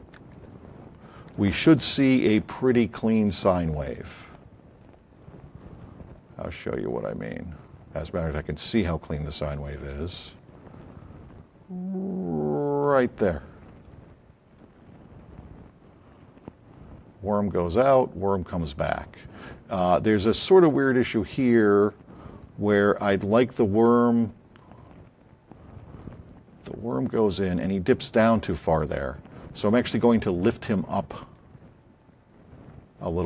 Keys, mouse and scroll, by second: 0.3-1.4 alt+drag, 7.8 click, 27.7 click, 31.3-33.2 drag.